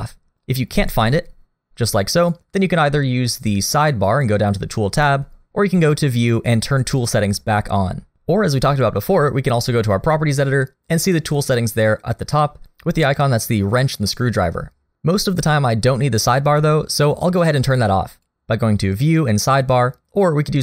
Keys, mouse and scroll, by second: 5.8 click, 11.4 click, 18.1 click.